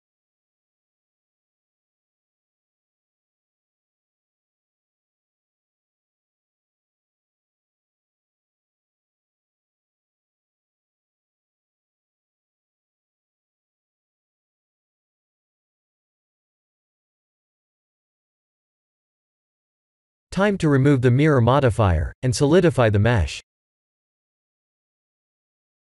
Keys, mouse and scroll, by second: 0.4 s, 5.2 g, 10.1 p, 12.2 click, 13.4 ctrl+z, 16.4 Tab, 17.0 ctrl+z, 18.3 click, 18.8 Tab, 19.5 click, 21.0 click, 23.2 click.